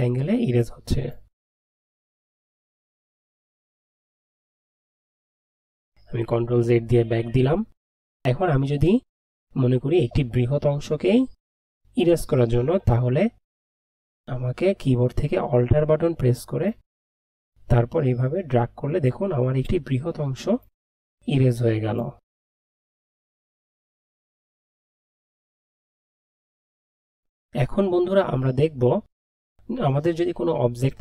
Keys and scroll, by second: 5.2 ctrl+z, 25.4 ctrl+z.